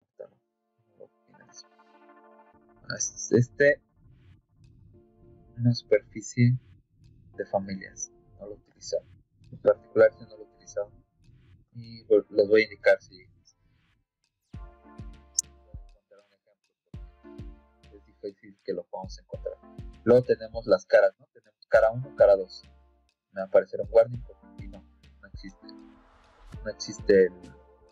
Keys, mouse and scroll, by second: 1.4 click, 2.8 click, 7.5 click, 8.2 click, 10.9 click, 11.5 middle click, 15.0 click, 16.9 click, 18.3 click, 19.7-21.4 drag, 23.2 click, 27.4 click.